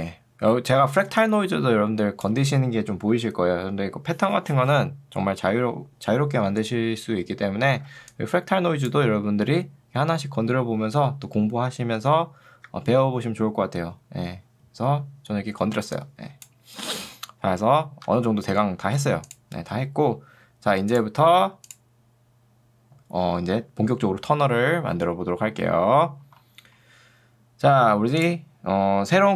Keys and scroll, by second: 1.0 2, 3.2 Escape, 8.0 ctrl+2, 12.6 Escape, 16.8 Escape, 18.2 v.